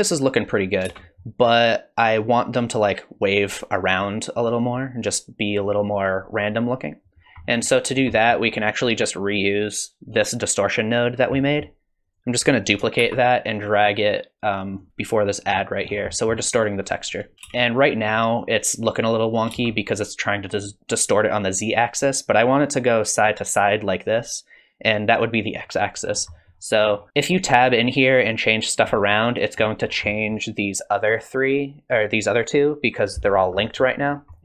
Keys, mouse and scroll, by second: 0.9 space, 7.2-8.5 scroll down 6, 7.4 middle click, 8.1 middle click, 8.5-10.3 scroll up 1, 10.3 scroll up 3, 11.1-11.6 scroll down 4, 11.4 middle click, 12.0 click, 13.0 shift+d, 14.9 middle click, 15.5-17.3 scroll up 7, 16.1 middle click, 17.3 middle click, 17.3 scroll up 1, 17.5 space, 19.5 space, 26.1-26.9 scroll up 3, 26.4 middle click, 26.9-28.1 scroll down 3, 27.1 middle click, 29.3 middle click, 29.3 scroll down 1, 29.8-32.1 scroll down 1, 32.1-32.4 scroll down 1, 33.3-34.4 scroll up 8, 33.6 middle click, 34.3 middle click.